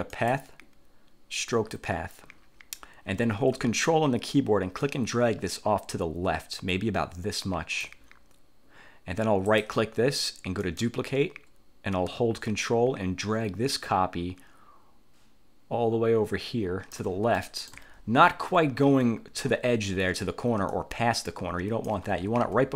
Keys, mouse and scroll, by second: 0.2 click, 1.6 click, 4.9-8.1 ctrl+drag, 9.6 click, 10.7 click, 12.6-17.2 ctrl+drag, 17.4 ctrl+click, 18.0-18.4 ctrl+scroll up 1, 20.8-22.2 ctrl+drag, 22.5 ctrl+z.